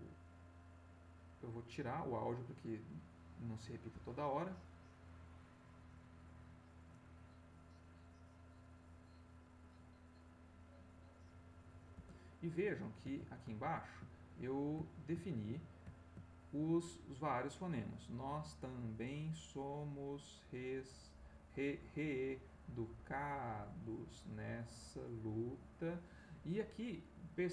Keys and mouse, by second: 0.6 click, 3.0 click, 3.9 space, 11.9 space, 13.8 ctrl+click, 14.2-15.7 ctrl+drag, 15.9 ctrl+middle click, 17.3-26.0 drag, 26.1 middle click.